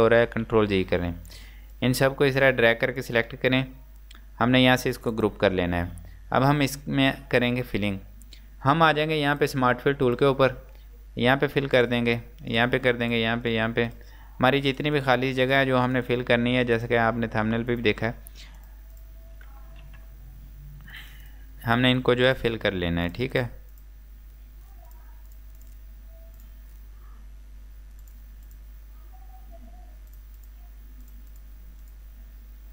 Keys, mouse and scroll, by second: 0.3 click, 0.7 z, 1.9 click, 6.0-7.7 scroll up 1, 8.7 scroll up 1, 8.8 click, 14.3 scroll up 1, 14.8 click, 18.2 scroll up 1, 18.7 click, 19.9 z, 20.2 scroll down 1, 21.0 click, 22.6 scroll up 1, 23.1 click, 24.1 scroll down 1, 24.4 scroll up 1, 25.9-26.4 scroll down 1, 26.4 click, 28.8 scroll down 1, 29.2 scroll up 1, 30.2 click, 32.2 scroll down 1, 32.5 scroll up 1.